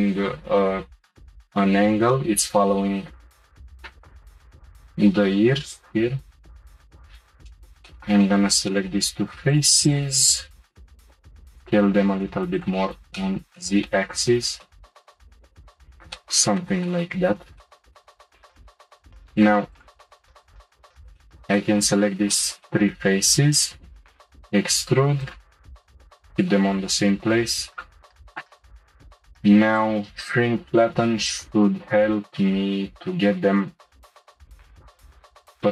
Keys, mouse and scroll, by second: 2.1-3.8 middle drag, 4.0-5.5 middle drag, 5.5 s, 7.1 shift+click, 7.5-9.5 shift+middle drag, 9.5 shift+click, 9.8 shift+click, 10.5 s, 13.1-15.1 middle drag, 15.4-19.1 middle drag, 15.5 scroll up 1, 19.1 click, 19.7 shift+click, 20.4 shift+click, 20.7 shift+click, 21.2 shift+middle click, 21.9-22.3 scroll up 1, 22.3-24.1 shift+middle drag, 24.1 e, 26.2 click, 27.1 g, 28.4 scroll down 1, 29.7-31.6 drag.